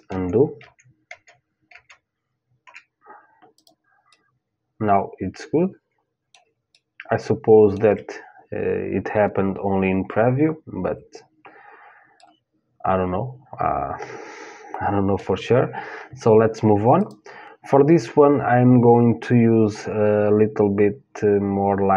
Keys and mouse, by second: 3.1-5.2 drag, 3.7-4.9 middle drag, 5.2 middle click, 6.4-8.3 middle drag, 11.8-13.8 middle drag, 16.6-18.6 drag.